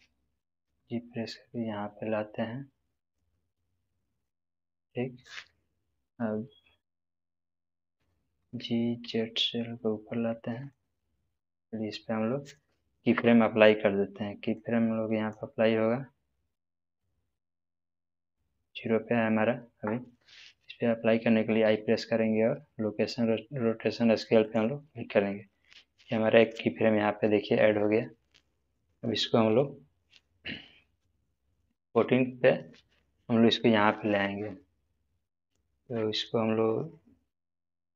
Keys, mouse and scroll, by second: 0.6 g, 4.1 click, 4.7-7.2 middle drag, 8.2 g, 9.0 z, 10.6 click, 14.6-15.5 drag, 17.2-18.5 middle drag, 24.4 click, 29.4 click, 29.5-32.0 drag.